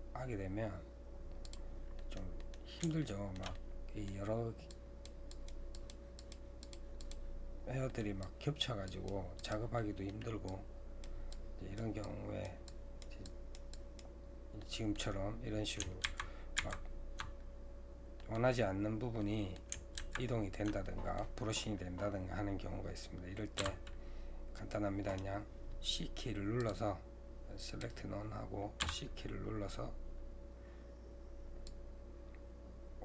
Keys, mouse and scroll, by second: 2.0-4.7 middle drag, 4.7-7.6 drag, 7.6 scroll down 1, 7.9 middle click, 8.3-9.8 drag, 9.8 middle click, 10.5-13.5 drag, 14.6-16.1 middle drag, 16.1 ctrl+z, 16.6 ctrl+z, 18.2 middle click, 18.6-19.2 scroll up 3, 19.2 middle click, 20.0 ctrl+z, 20.9-23.6 middle drag, 23.6 c.